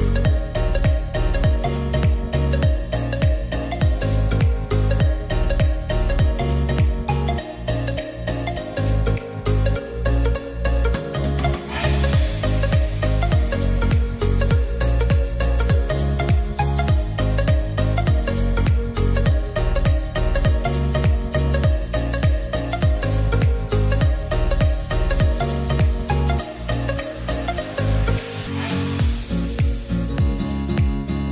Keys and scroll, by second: 0.7 Escape, 8.5 Escape, 10.4 Return, 16.2 Return, 20.0 Return.